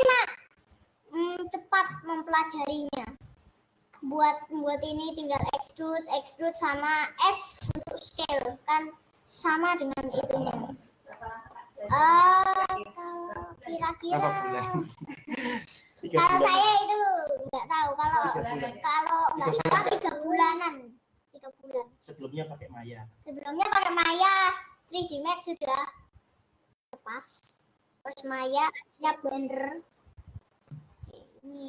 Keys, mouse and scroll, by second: 0.0-11.9 middle drag, 11.9-12.4 scroll up 1, 12.4 scroll up 1, 12.6-13.4 scroll down 1, 13.4-14.0 scroll down 1, 14.0-31.6 middle drag.